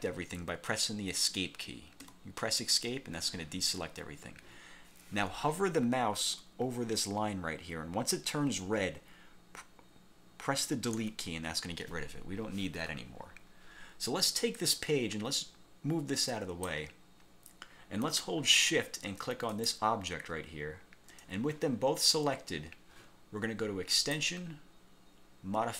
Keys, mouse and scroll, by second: 2.2 Escape, 11.1 Delete, 14.7-17.0 drag, 19.6 shift+click, 24.0 click.